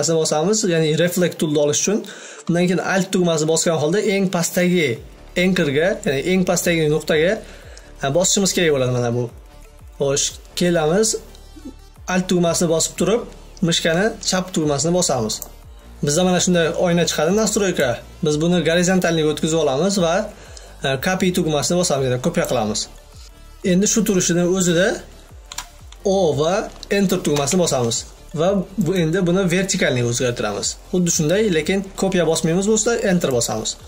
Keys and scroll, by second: 25.0 Return.